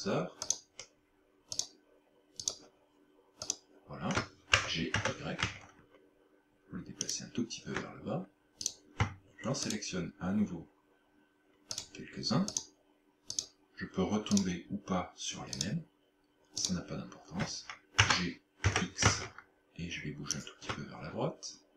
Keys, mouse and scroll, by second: 0.5 shift+right click, 1.6 shift+right click, 2.5 shift+right click, 3.5 shift+right click, 4.6 g, 7.1 shift+click, 8.7 right click, 9.7 shift+right click, 11.8 shift+right click, 12.6 shift+right click, 13.4 shift+right click, 14.4 shift+right click, 15.6 shift+right click, 16.6 shift+right click, 18.0 g, 20.4 shift+click.